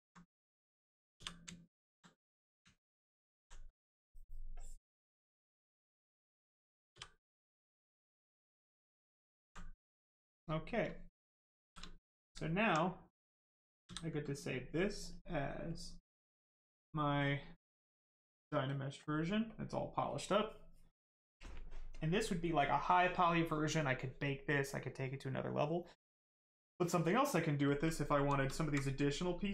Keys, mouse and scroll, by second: 2.7 alt+right click, 4.5 click, 4.5 click, 6.9 f, 7.5 right click, 8.6 alt+right click, 10.1 right click, 10.2 right click, 11.6 shift+f, 11.8 right click, 12.4 alt+right click, 12.7 right click, 12.7 right click, 13.8 ctrl+s, 15.6 click, 18.6 click, 27.8 right click, 28.2 shift+right click, 28.5 alt+right click, 29.1 right click, 29.1 right click.